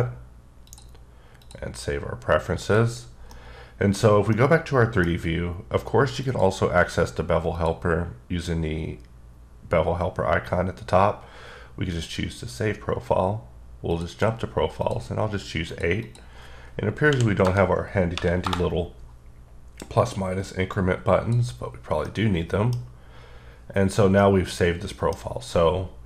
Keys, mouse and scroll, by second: 0.7 click, 1.5 click, 2.5 click, 3.4 middle click, 4.4 middle click, 6.3 click, 7.6 click, 12.0 click, 13.9 click, 14.8 click, 15.7 click, 16.1 click, 17.1 Right, 17.5 BackSpace, 18.2 9, 18.5 Return, 20.8 click, 22.1 middle click, 24.2 middle click.